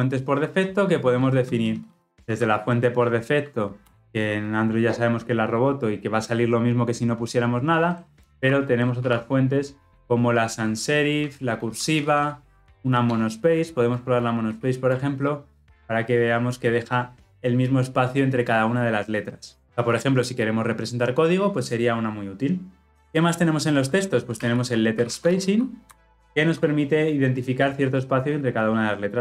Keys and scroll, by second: 3.8 Return.